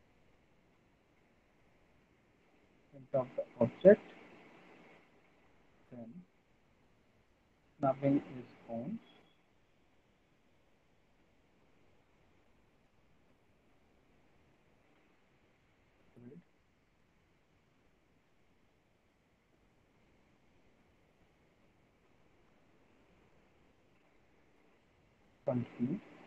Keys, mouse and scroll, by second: 0.8 click, 1.5 click, 2.6 click, 3.4 alt+middle click, 3.8 middle click, 4.0 middle click, 5.2 click, 7.7 alt+middle click, 10.9 click, 11.8 alt+middle click, 12.2 middle click, 12.4 middle click, 12.8 alt+middle click, 13.0 alt+middle click, 14.4 click, 14.9 ctrl+z, 16.2 click, 18.5 click, 19.6 alt+middle click, 20.0 middle click, 20.4 middle click, 22.2 alt+middle click, 22.7 middle click, 24.4 alt+middle click, 25.5 f.